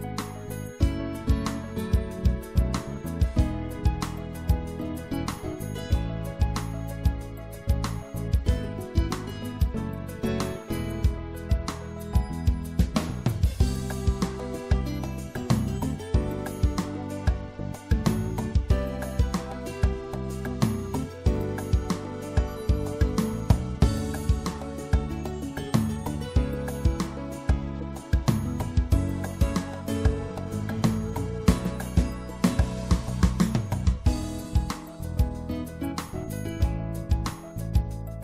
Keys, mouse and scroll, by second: 0.2-2.8 middle drag, 1.4 e, 2.8-4.6 drag, 5.1 middle click, 7.1-8.9 drag, 11.5-12.6 middle drag, 12.6-14.4 drag, 15.7-19.2 middle drag, 17.1 click, 19.4 middle click, 19.8-21.5 middle drag, 22.6-24.0 drag, 24.0 middle click, 30.3-32.1 middle drag, 34.1 middle click, 35.6-37.2 right drag, 37.2-38.2 middle drag.